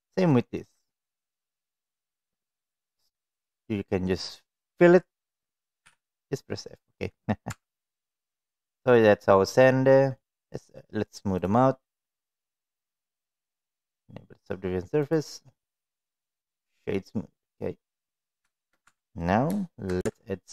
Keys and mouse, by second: 0.2 alt+click, 5.8 f, 7.4 Tab, 7.9 middle click, 8.6 click, 9.1-9.6 middle drag, 9.9 middle drag, 11.4 click, 12.4 click, 13.5-15.1 drag, 15.5 middle click, 17.8 click, 18.5 shift+middle click, 18.8 Tab, 19.7 shift+middle click, 19.9 Tab.